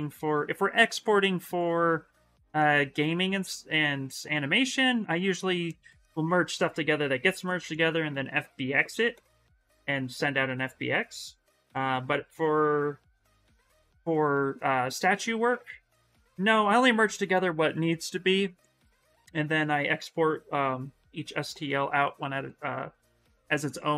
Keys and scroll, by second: 1.8 s, 19.4 s, 21.7 s, 22.7 s.